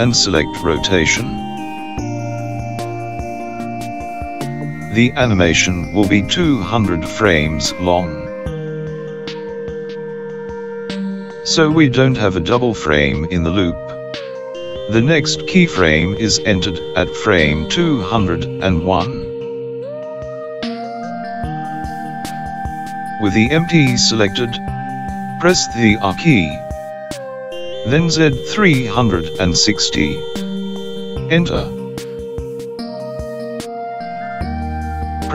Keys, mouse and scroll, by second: 1.1 i, 6.7 click, 8.7 KP_0, 12.2 click, 27.2 r.